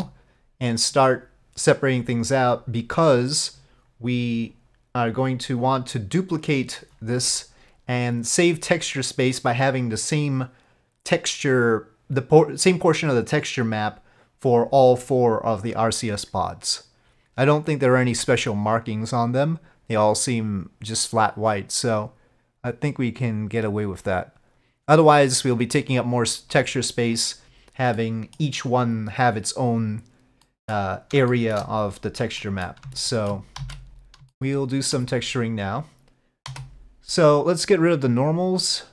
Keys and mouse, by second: 28.0 middle click, 30.5 middle click, 31.4 shift+middle click, 32.5 middle click, 33.1 shift+middle click, 33.7 alt+a, 34.4 shift+middle click, 36.6 3, 38.5 click.